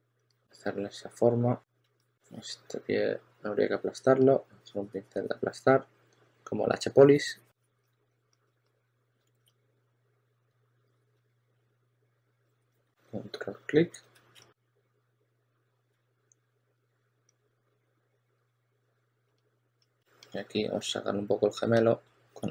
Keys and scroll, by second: 1.7 s, 3.3-4.0 typing, 8.6 2, 10.4-15.8 typing, 19.2 s, 19.9 s, 20.5 2.